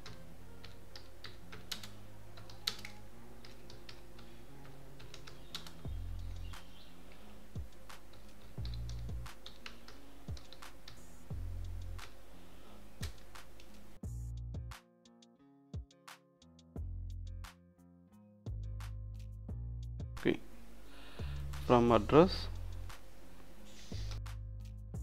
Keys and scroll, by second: 0.0-5.6 typing, 7.2-10.9 typing, 13.0 Return, 14.7-18.0 typing, 16.1 Return, 19.8 2, 24.1-25.0 typing, 24.7 Return.